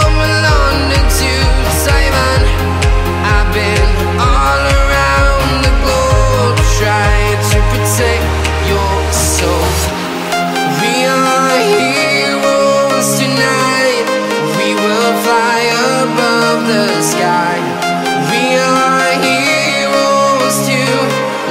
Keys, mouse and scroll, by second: 0.3 typing, 0.8 Return, 1.8 click, 2.8 right click, 4.1 click, 4.4 right click, 5.7 click, 6.3 right click, 7.5 click, 8.1-8.5 scroll up 1, 8.5 click, 8.8 right click, 11.7 click, 12.8 right click, 13.6 scroll up 1, 15.1 click, 15.5-21.5 right drag.